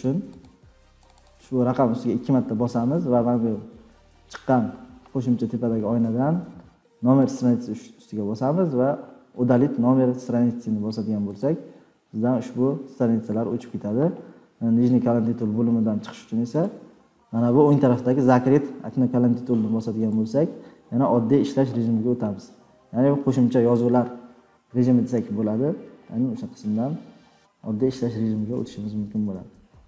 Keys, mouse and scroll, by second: 0.0 click, 0.4 click, 1.1 click, 1.2 click, 11.7-14.2 drag, 16.6-17.1 drag, 20.1 click, 20.8 scroll down 4, 21.0-22.5 scroll, 22.6-23.1 scroll down 20, 24.0-24.5 scroll down 6, 25.1 scroll down 2, 25.9 scroll down 1, 26.0-26.3 scroll, 27.2-27.8 scroll.